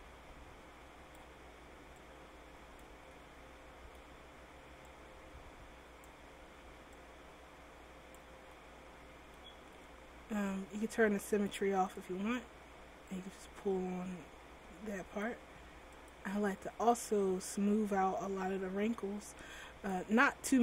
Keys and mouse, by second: 3.8 click, 5.0-8.7 middle drag, 8.7 click, 11.5-12.8 drag, 19.4 click.